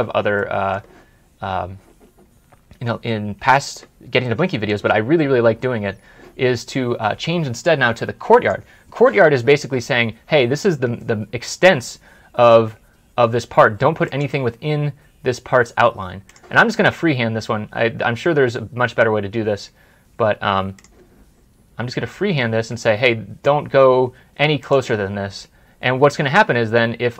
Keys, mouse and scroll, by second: 0.2 middle click, 4.1 middle click.